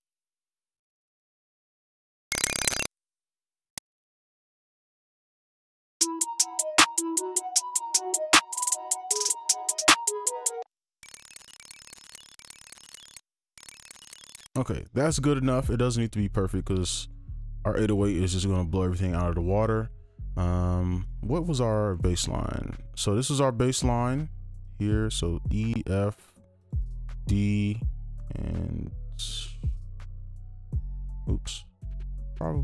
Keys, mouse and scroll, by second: 0.1 click, 0.2 ctrl+q, 0.3 right click, 0.5 click, 0.5 shift+Down, 0.6 right click, 0.6 ctrl+click, 1.1 ctrl+z, 1.3 scroll up 1, 1.4 scroll down 1, 1.9 right click, 2.2 right click, 2.3 space, 2.8 space, 3.0 ctrl+click, 3.1 shift+click, 3.5 ctrl+click, 3.7 right click, 3.7 click, 3.8 click, 3.8 alt+u, 4.0 scroll up 1, 4.2 click, 4.3 ctrl+q, 4.4 right click, 4.5 click, 4.7 click, 4.8 alt+u, 5.2 ctrl+2, 5.3 ctrl+click, 5.7 right click, 6.0 space, 6.7 right click, 10.6 right click, 10.7 ctrl+click, 10.8 alt+scroll down 1, 11.0-14.4 typing, 11.4 ctrl+click, 11.6 right click, 11.6 shift+scroll, 12.1 ctrl+click, 12.3 shift+click, 12.8 right click, 13.3 ctrl+click, 13.5 shift+right click, 13.5 shift+click, 13.6 right click, 18.4 right click, 21.9 scroll down 1, 22.1-23.6 scroll up 1, 23.7 ctrl+click, 24.6 ctrl+shift+click, 26.5 ctrl+shift+click, 30.2 right click, 31.1 right click.